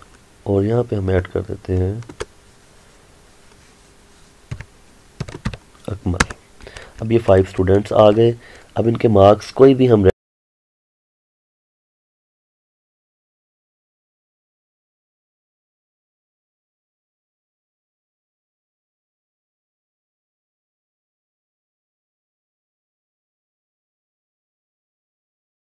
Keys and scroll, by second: 1.3 Return, 6.3 Return, 11.8 Return, 12.7 Return, 13.6 Return, 14.5 Return, 16.0 Tab, 17.0 Return, 17.7 Return, 18.6 Return, 19.3 shift+Return, 20.4 shift+Return, 21.9 Return, 23.0 Return, 24.6 Return.